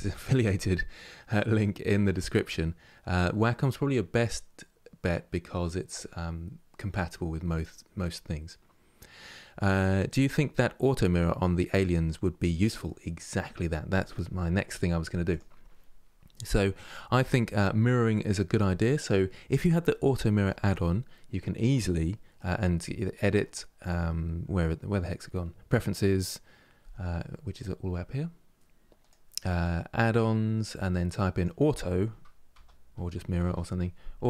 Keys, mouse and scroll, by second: 15.0-16.1 drag, 16.1-22.8 middle drag, 22.8-28.2 drag.